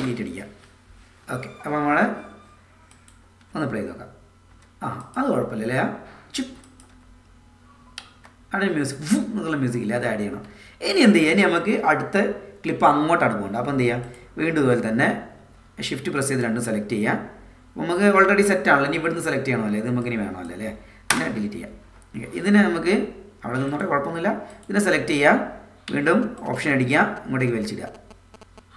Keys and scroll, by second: 0.0 shift+Delete, 3.4 space, 6.5 space, 8.1 space, 10.0 space, 21.1 BackSpace.